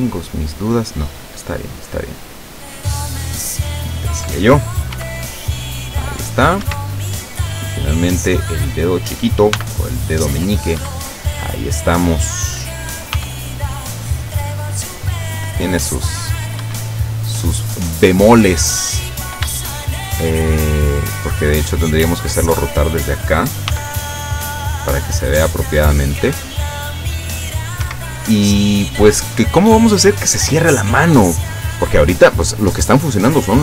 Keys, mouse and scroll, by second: 1.3 right click, 2.1 click, 3.0 click, 3.4-4.5 middle drag, 5.0 r, 6.7 Escape, 7.0 middle click, 8.0 right click, 8.5 middle click, 9.6 r, 10.9 Escape, 11.4 middle click, 12.1 right click, 13.2 r, 16.7 Escape, 17.1-18.7 middle drag, 18.7-19.0 scroll up 2, 19.6 shift+scroll up 2, 20.4-21.9 shift+middle drag, 22.1-23.2 middle drag, 23.8 r, 27.9 Escape, 28.4 scroll down 2, 28.9-30.4 middle drag.